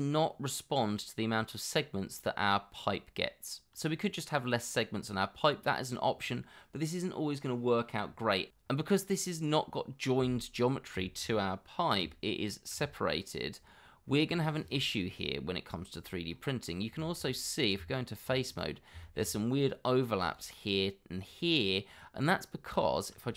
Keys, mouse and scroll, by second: 4.6 scroll down 1, 5.8-6.8 scroll up 1, 8.6 scroll up 1, 8.8 l, 8.9 scroll down 1, 9.9 scroll up 1, 11.0 shift+middle click, 12.0 l, 14.5-14.8 scroll down 1, 14.9 middle click, 16.3 scroll up 1, 17.2 shift+middle click, 17.2 scroll up 1, 17.7 Tab, 19.0 shift+middle click, 19.5-19.8 scroll up 1, 20.8 scroll down 1, 21.6 middle click.